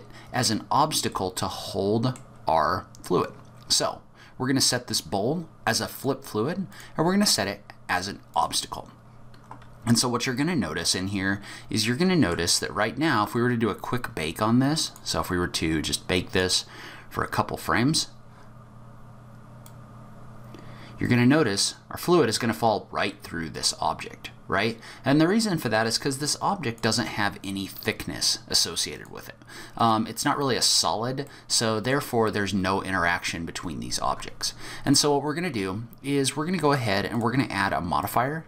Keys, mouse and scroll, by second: 1.1 middle click, 6.0 click, 6.7 click, 10.8 middle click, 14.8 click, 16.3 click, 19.6 click, 27.7 click, 28.9 click, 30.9-31.3 scroll up 1, 31.3 middle click, 34.8 click, 37.1 click, 38.0 click.